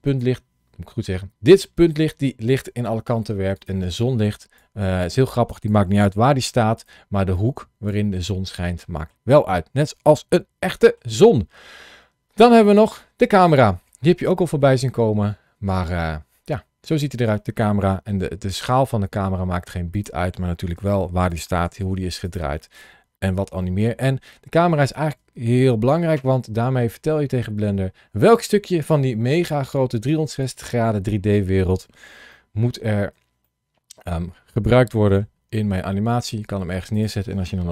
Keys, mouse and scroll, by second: 3.4 click, 4.4 click, 5.9 g, 6.6 click, 7.2 click, 8.1 middle click, 9.2 scroll down 1, 10.5 scroll down 1, 10.6 shift+middle click, 11.0 middle click, 12.5 click, 13.6-14.2 scroll up 2, 14.2 shift+middle click, 18.0 s, 19.8 click, 20.6 g, 21.1 click, 21.5 r, 21.6 r, 22.1 click, 22.7-23.2 scroll down 2, 23.4 shift+middle click, 24.6 scroll down 2, 25.3 shift+middle click, 26.1 middle click, 28.0 scroll down 1, 29.5 scroll up 2, 32.1 shift+middle click, 33.3 middle click, 35.0 g, 36.8 click, 37.6 KP_0.